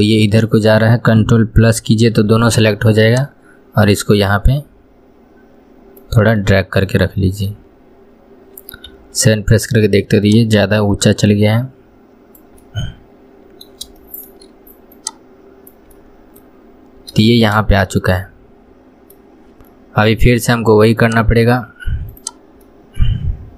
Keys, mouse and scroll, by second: 0.1-2.1 shift+middle drag, 2.1 ctrl+KP_Add, 3.4 click, 6.7-8.1 middle drag, 8.1 scroll up 2, 9.2 KP_1, 10.5 click, 12.9-15.3 middle drag, 15.3 click, 16.3-17.2 middle drag, 17.2 scroll up 1, 17.5-19.5 shift+middle drag, 19.5-19.9 scroll up 1, 21.3-22.5 drag, 23.0-23.5 middle drag.